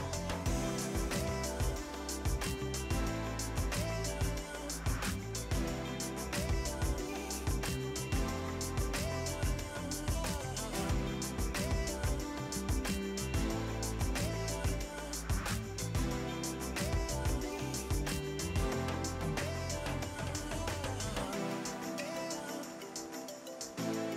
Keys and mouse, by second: 0.2 KP_2, 0.3 Return, 0.7 click, 1.0 v, 1.1 click, 1.3 ctrl+click, 22.0 click, 24.1 KP_1.